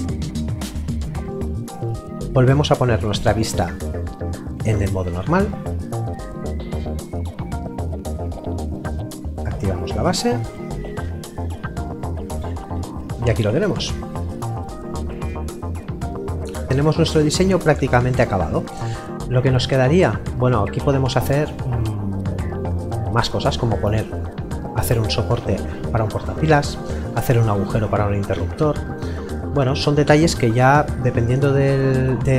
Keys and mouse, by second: 6.2 middle click, 9.3 click, 11.8 middle click, 17.4 middle click, 26.2 middle click.